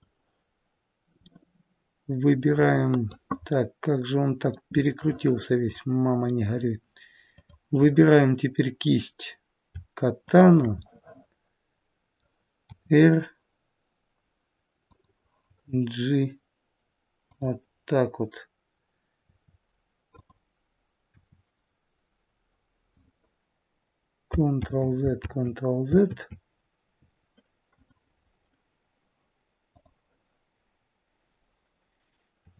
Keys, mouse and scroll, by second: 1.2 middle click, 3.5 middle click, 6.2 middle click, 7.3 click, 7.8 middle click, 10.2 shift+click, 10.7 shift+click, 10.8 middle click, 12.6 r, 15.4 g, 19.2 w, 20.2 click, 21.0 w, 24.6 ctrl+z, 25.2 ctrl+z, 26.1 z, 29.9 click.